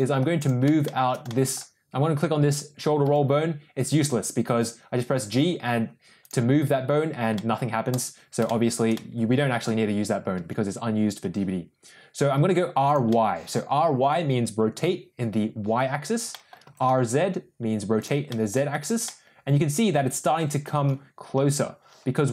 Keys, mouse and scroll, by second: 0.4 click, 0.8 shift+middle drag, 1.2 middle drag, 3.0 g, 7.3 middle click, 8.4 shift+middle click, 8.8 middle click, 10.3 r, 13.0 middle click, 16.2 middle click, 16.6 r, 18.2 middle click, 19.0-20.3 middle drag.